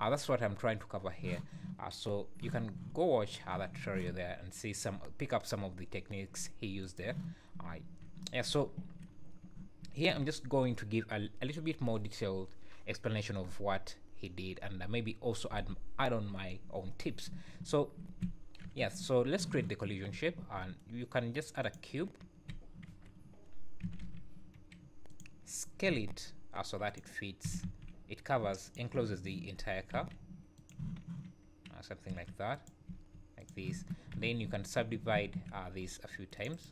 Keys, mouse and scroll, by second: 8.6 scroll down 3, 9.1 scroll up 3, 17.6 scroll down 3, 18.1 `, 18.6 KP_1, 19.1 scroll up 4, 20.4 shift+a, 22.8-23.2 scroll down 3, 22.8 KP_7, 23.8 g, 25.9 s, 27.4 s, 28.9 KP_1, 29.9 g, 30.8 z, 32.1 g, 32.9 s, 33.7 Tab, 34.1 z, 34.4 `, 35.3 ctrl+r.